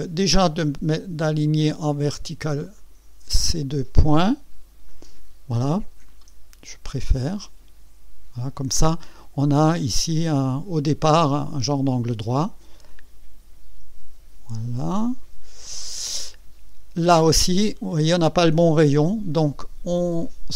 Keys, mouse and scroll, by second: 2.7 click, 4.9 click, 7.0-8.8 drag, 10.2-11.7 drag, 12.9-16.5 drag, 20.2 click.